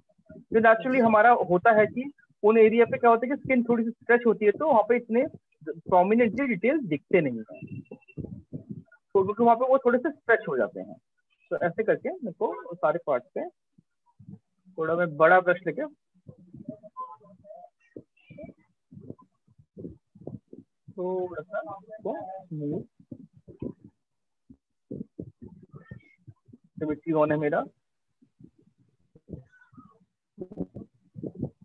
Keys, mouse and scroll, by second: 0.3 click, 1.3 click, 3.4 click, 4.6 click, 5.5 click, 8.0 click, 9.0 alt+click, 9.3 alt+click, 9.8 click, 11.6 alt+click, 12.1 click, 12.9-13.6 ], 15.8 click, 16.8 click, 17.5 shift+click, 17.7 shift+click, 18.7 click, 19.9 alt+click, 25.3 click, 26.2 click, 26.9 alt+click, 28.7 click, 29.5 click, 30.3 click, 30.7 alt+click, 31.3 alt+click.